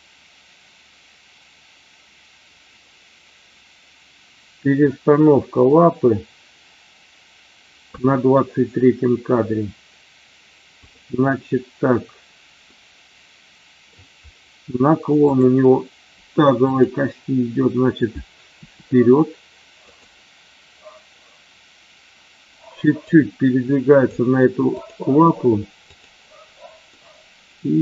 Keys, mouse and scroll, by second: 12.6-13.8 middle drag, 15.3 click, 16.7-17.1 drag, 18.6 r, 23.2 click, 24.7 click, 25.9-26.3 drag, 26.9-27.8 middle drag.